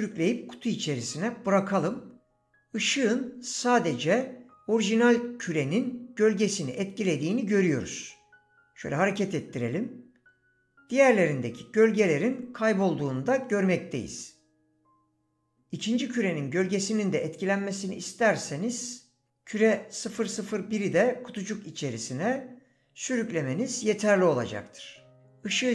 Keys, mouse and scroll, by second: 13.5 click, 24.3 click.